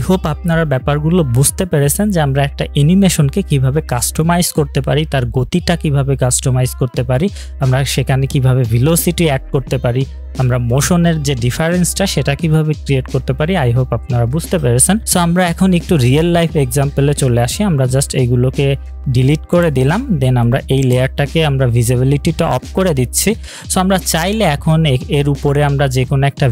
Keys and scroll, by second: 19.8 Delete.